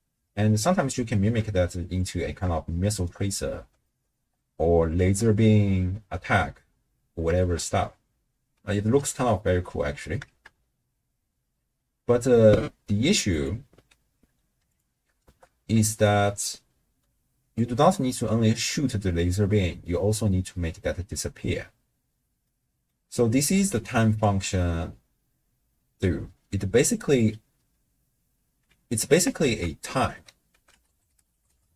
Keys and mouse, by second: 0.2 space, 1.2 space, 2.1 click, 2.7-3.1 shift+drag, 3.8 shift+drag, 4.4-4.9 drag, 5.0 shift+space, 6.7 space, 7.4 shift+space, 8.8 space, 9.2-9.8 middle drag, 9.8 click, 10.3 shift+space, 12.0 space, 12.4 click, 13.3-14.7 drag, 15.3 shift+space, 18.9 space, 22.5 middle click, 23.4-25.3 d, 23.7 click, 25.8 d, 27.7-28.5 d, 28.8 d, 29.5 ctrl+a.